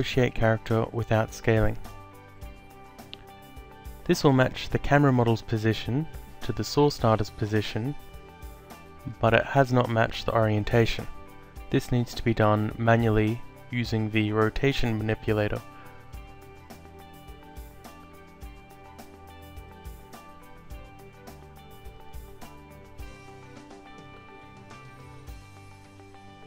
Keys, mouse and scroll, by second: 0.4 click, 2.1 alt+middle click, 3.6 alt+click, 8.8 click, 14.3 e, 15.4 click, 16.8 alt+click, 18.4 f, 20.9 click, 22.8 ctrl+z, 23.4 click, 25.3 ctrl+click, 26.2 alt+click.